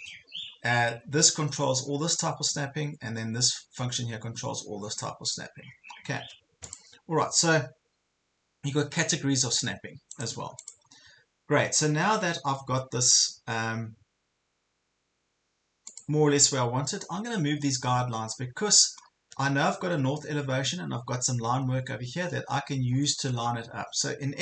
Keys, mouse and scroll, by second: 7.6 scroll up 1, 10.1 click, 16.6 scroll up 1, 17.0 scroll down 1, 18.4 scroll down 1, 19.0 scroll up 1, 19.6 ctrl+scroll up 1, 21.6 ctrl+scroll down 1, 23.0 scroll up 2, 23.7 ctrl+scroll up 1.